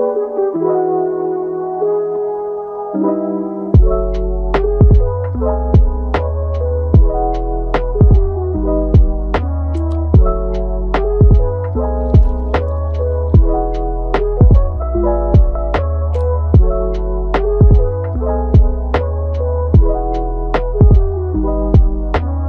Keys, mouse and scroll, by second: 1.4-3.0 middle drag, 3.0 g, 4.0 Tab, 4.3 click, 4.7 g, 5.8 click, 6.1 g, 6.8 click, 7.1 g, 7.8-8.3 middle drag, 8.3 Tab, 8.7-9.6 middle drag, 9.6 Tab, 10.4 click, 10.6 g, 11.3 click, 11.6 g, 12.7 click, 13.0 g, 13.5-14.2 middle drag, 14.2 g, 15.1 click, 15.3 g, 16.2 click, 16.5 g, 17.5 click, 18.1 g, 19.1-20.4 middle drag, 20.4 Tab, 20.8 Tab, 21.5 click, 21.8 click, 22.1 g.